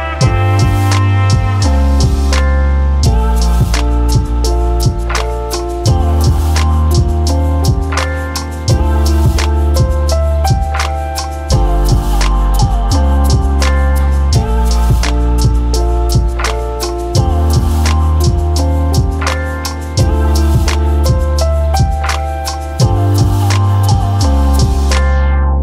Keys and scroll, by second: 1.4-3.4 typing, 6.3 ctrl+1, 17.5 ctrl+d, 18.2 ctrl+d, 25.0-25.6 typing.